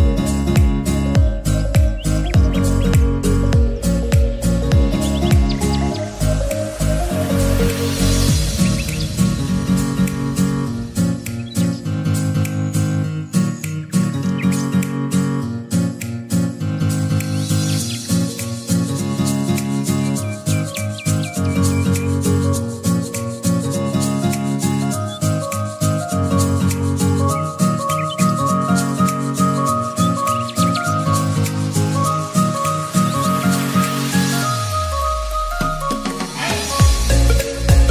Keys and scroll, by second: 12.5 ctrl+z.